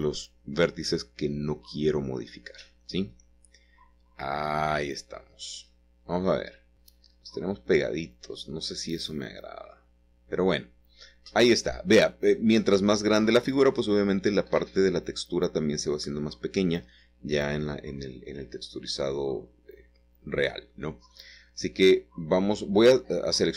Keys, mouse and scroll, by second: 0.0-2.9 middle drag, 2.2-3.2 scroll up 2, 7.4 middle click, 13.3 middle click, 15.3 middle click, 16.2 Escape, 16.5 scroll down 2, 17.2 shift+middle click, 18.2 middle click, 19.0 s, 21.8 click, 22.0 click, 22.3-22.7 scroll up 2, 22.7-23.5 scroll down 2.